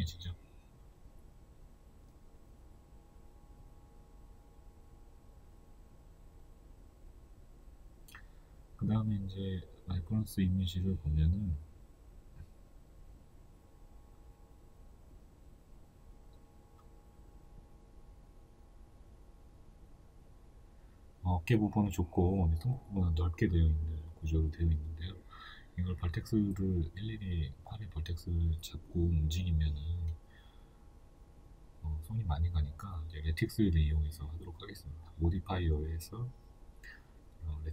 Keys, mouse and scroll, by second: 1.3 s, 4.4-4.7 scroll down 2, 5.0-5.4 scroll up 2, 8.5 KP_3, 10.1 Tab, 14.6-28.2 middle drag, 28.2 click, 29.5-30.9 shift+middle drag, 30.9 click, 31.3 right click, 31.6-32.6 middle drag, 32.6 click.